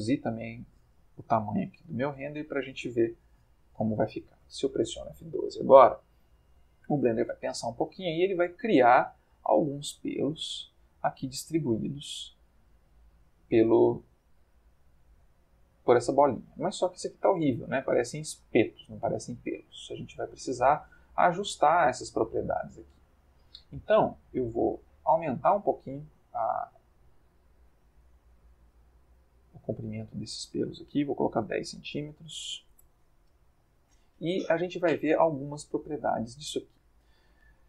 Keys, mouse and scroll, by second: 0.3 click, 1.5 5, 1.6 0, 1.8 Return, 4.0 F12, 8.1-9.4 ctrl+middle drag, 10.2 ctrl+middle click, 11.8-12.5 shift+middle drag, 14.4 middle click, 15.8 middle click, 17.7 middle click, 18.6 ctrl+middle click, 22.8 click, 26.0 click, 28.0 click, 29.9 click, 31.3 1, 32.3 c, 32.5 m, 32.7 Return, 36.1-37.2 ctrl+middle drag.